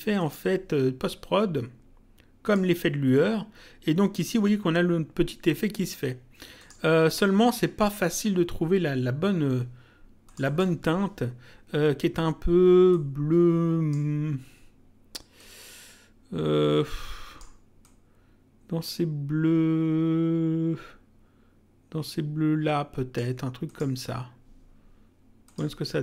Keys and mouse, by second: 0.2 click, 2.4 click, 6.6 click, 10.2 click, 12.9 click, 15.3 click, 17.8 click, 23.7 click, 25.5 click.